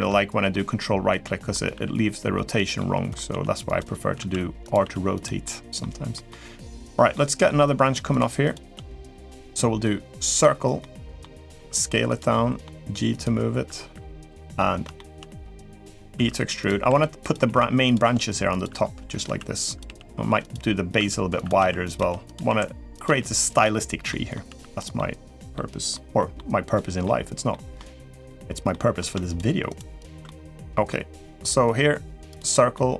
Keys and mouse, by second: 0.3-1.3 middle drag, 1.5 r, 2.5 middle click, 3.1 g, 3.9 s, 4.6 r, 5.2 middle click, 5.9 middle click, 6.9 middle click, 7.9 shift+click, 10.1 click, 10.6 middle click, 11.3 s, 12.1 middle click, 12.5 g, 13.6 r, 14.3 middle click, 14.7 shift+middle click, 15.9 e, 17.2 s, 17.2 g, 17.8 r, 19.6 g, 19.6 s, 20.7-22.8 typing, 23.9 middle click, 24.2 s, 24.7 middle click, 25.7 middle click, 26.5 middle click, 27.3 middle click, 28.0 click, 28.5 middle click, 29.4 shift+click, 29.8 shift+click, 30.0 middle click, 30.6 middle click, 32.1 click, 32.5 middle click.